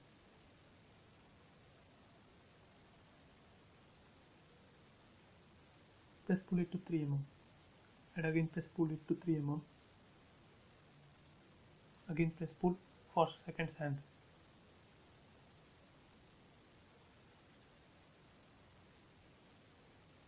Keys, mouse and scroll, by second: 0.4 p, 1.1 space, 1.3 click, 2.0 p, 2.1 click, 5.0-5.8 typing, 5.7 Return, 7.2 click, 9.7 space, 10.9 p, 11.3 click, 12.9-14.1 typing, 13.8 Return, 14.3-14.6 scroll down 1, 16.1 middle click, 16.4-17.3 scroll down 1, 18.4 click, 19.0-19.7 scroll up 1, 19.7 shift+middle click.